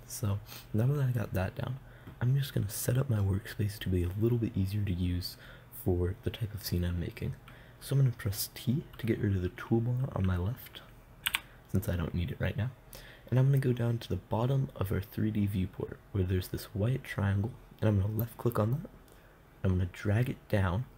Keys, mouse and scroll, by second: 11.7 t, 18.6-20.7 drag.